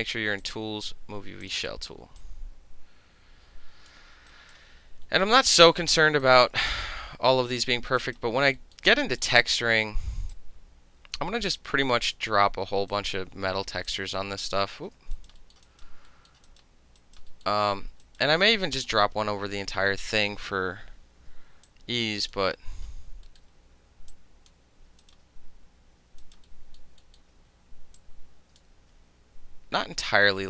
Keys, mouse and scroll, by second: 0.4 click, 1.4 click, 2.2-3.9 drag, 4.3 alt+right click, 5.1 alt+middle click, 5.4 alt+middle click, 5.6 alt+right click, 5.7 alt+middle click, 6.0 alt+middle click, 6.2 alt+right click, 6.4 alt+middle click, 6.6 alt+middle click, 6.7 alt+right click, 6.8 alt+middle click, 7.5 alt+middle click, 7.9 alt+middle click, 8.0 alt+click, 8.2 alt+middle click, 8.8-9.2 alt+middle drag, 9.4-10.3 alt+middle drag, 10.3-12.2 drag, 12.2 middle click, 12.9 alt+right click, 13.1-13.9 alt+middle drag, 13.9-14.5 drag, 14.5 ctrl+middle drag, 14.7 ctrl+z, 15.2 alt+right click, 15.4 alt+middle click, 15.5 alt+middle click, 15.7 alt+right click, 15.8 alt+middle click, 16.3 alt+middle click, 16.5 alt+right click, 16.6 alt+middle click, 17.0 alt+right click, 17.2 alt+middle click, 17.5 alt+middle click, 20.9 -, 21.7-22.3 drag, 22.3 alt+middle click, 23.3 alt+middle click, 24.1 click, 25.0 alt+right click, 26.2 alt+right click, 26.5-28.0 alt+middle drag, 28.0 alt+click, 28.6-30.4 ctrl+alt+middle drag, 28.8 ctrl+z.